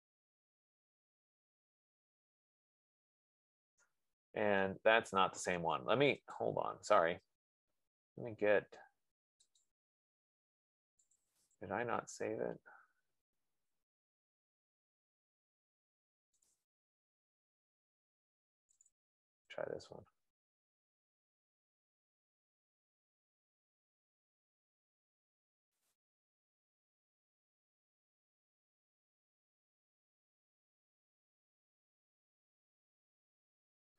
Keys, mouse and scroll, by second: 6.9 click, 9.9 click, 11.7 click, 11.9 click, 17.1 click, 17.3 click, 18.7 F15, 19.1 click, 19.5 click, 26.2 click.